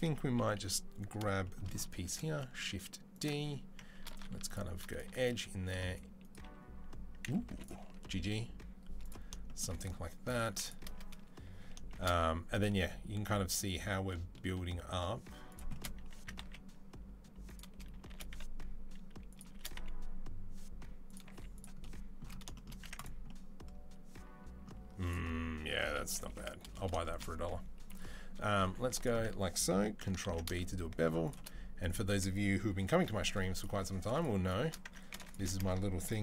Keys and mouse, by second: 0.2 KP_3, 1.9 shift+d, 4.0 ctrl+r, 4.9 2, 5.5 r, 7.3 1, 7.4 click, 7.8 g, 10.3 3, 11.8 shift+d, 16.0 s, 17.9 shift+d, 19.4 shift+d, 21.1 z, 22.7 Tab, 22.8 click, 22.9-24.8 middle drag, 24.8 click, 25.0-36.2 middle drag, 25.4 Tab, 25.9 KP_3, 28.4 2, 30.0 ctrl+b, 32.6 g, 36.1 ctrl+b.